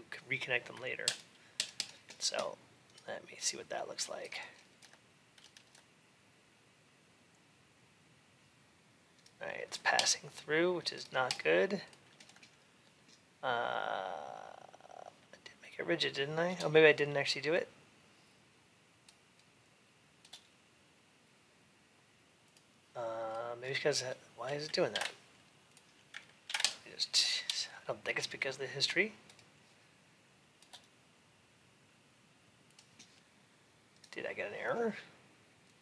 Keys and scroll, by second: 24.7 ctrl+d, 26.3 ctrl+h.